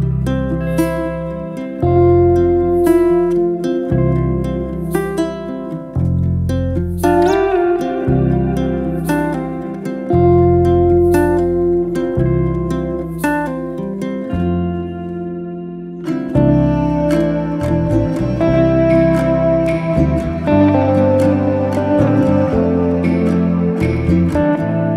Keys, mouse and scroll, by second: 2.4 alt+click, 3.3 3, 3.5 click, 3.9 alt+click, 4.6 click, 5.1-5.7 scroll down 2, 5.4 Tab, 5.8 middle drag, 6.1 drag, 6.4 scroll down 1, 6.6-7.5 middle drag, 7.5-7.9 scroll up 4, 7.9-8.3 ctrl+middle drag, 8.3 scroll down 4, 8.5 click, 8.8-11.4 middle drag, 13.0-14.4 shift+middle drag, 14.7 Tab, 15.3 Tab, 15.4 click, 15.6 Tab, 16.0-16.5 scroll up 2, 16.5 shift+middle click, 16.9 1, 17.4 click, 18.1 click, 18.7 shift+s, 19.8 Tab, 20.1-21.1 scroll down 2, 21.1 shift+right click, 21.4 shift+a, 23.2 scroll up 1, 23.4-24.9 shift+middle drag.